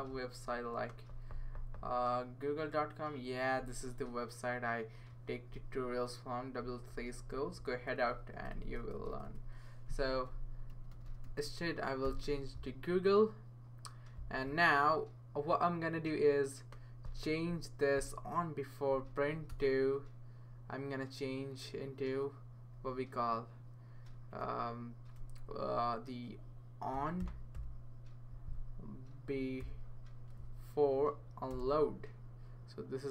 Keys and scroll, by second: 5.3 Left, 5.7 Right, 6.2 Right, 6.3 Right, 6.4 Right, 6.5 Right, 10.4-12.5 typing, 19.5 BackSpace, 24.1 Right, 25.0 BackSpace, 26.9-27.5 typing, 29.3-30.1 typing, 31.0 Down, 31.5 Return.